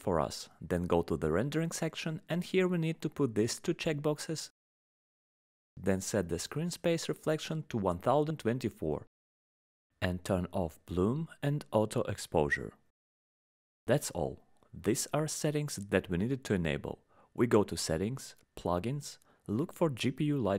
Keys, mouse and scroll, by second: 1.0 click, 2.0 click, 2.9-4.0 scroll down 10, 5.1 click, 5.1-5.6 scroll, 5.6-6.7 scroll, 7.3 click, 7.3 scroll down 11, 7.8 click, 8.8 scroll down 1, 8.9-9.8 scroll, 9.8 click, 12.1 scroll down 6, 12.3 scroll, 12.3 scroll down 4, 12.5-14.0 scroll, 14.7 click, 15.4 click, 15.6-17.2 scroll, 17.2 middle click, 18.1 click, 20.4 click.